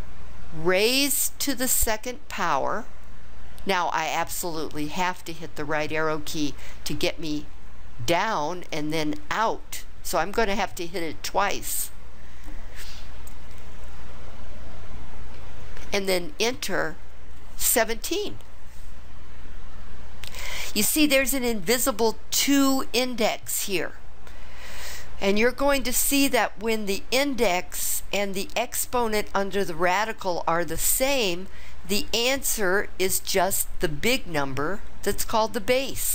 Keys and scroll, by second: 0.9 ^, 2.4 2, 6.4 Right, 8.7 Right, 16.4 Return.